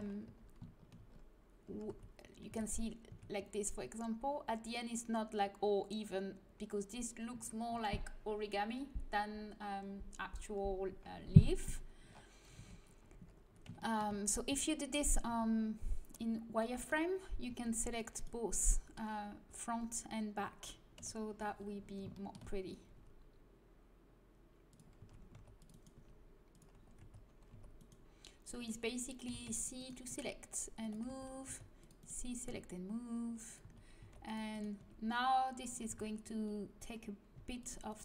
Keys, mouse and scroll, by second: 0.2 z, 0.9 a, 1.8 a, 2.4 a, 3.0 Tab, 10.9-12.1 middle drag, 12.5 Tab, 14.4 z, 15.2 c, 16.8-19.9 right drag, 17.4 c, 18.6-20.8 middle drag, 20.9 KP_1, 22.9 g, 24.9 a, 25.8 c, 25.8-27.7 drag, 25.9 g, 26.9 a, 27.4 c, 29.2-32.4 typing, 33.3 click, 33.6 a, 33.9 c, 34.7 g, 35.9 a, 37.3 c.